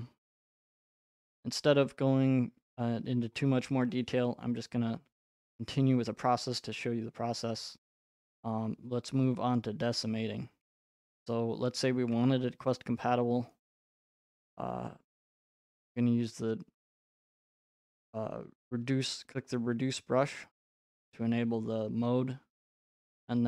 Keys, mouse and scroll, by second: 1.4-1.9 scroll, 3.3-3.8 scroll, 6.6 right click, 17.3 click.